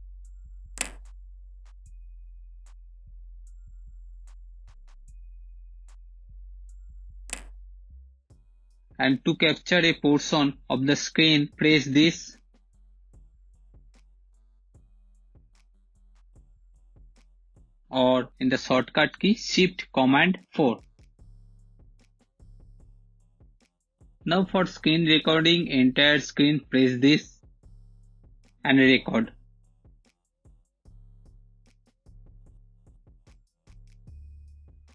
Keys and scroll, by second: 5.8 space, 6.7 space, 9.7 shift+super+5, 18.8 shift+super+4, 32.6-34.3 typing.